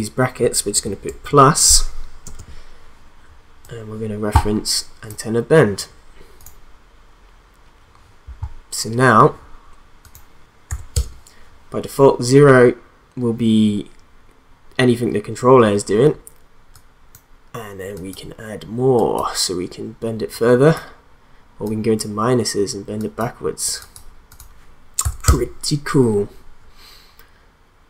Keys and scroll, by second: 1.0 shift+=, 2.2 space, 10.7 0, 10.9 Return, 25.0 0, 25.2 Return.